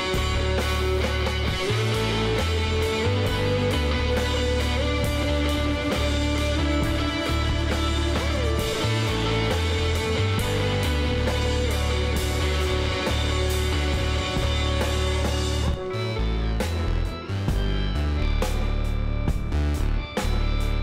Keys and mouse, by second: 0.3-2.8 drag, 2.1 g, 5.4-8.1 middle drag, 8.1 click, 8.6 Tab, 9.4 a, 11.3-12.5 middle drag, 12.6 KP_Divide, 13.8-16.2 middle drag, 16.2-17.4 drag, 17.4 middle click, 17.7 click, 17.8-20.8 middle drag.